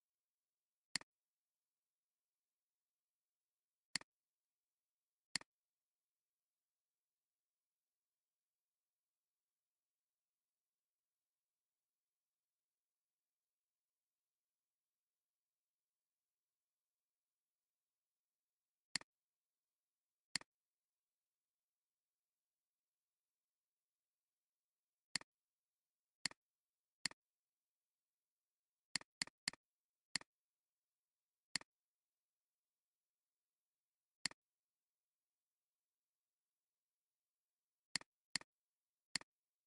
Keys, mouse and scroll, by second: 2.2 Delete, 3.7 space, 4.8-5.4 alt+scroll up 2, 5.2 space, 6.2 space, 25.1 click, 26.0 space, 29.1 double click, 38.1 space, 38.3 double click, 38.7 alt+scroll down 2, 39.0 space.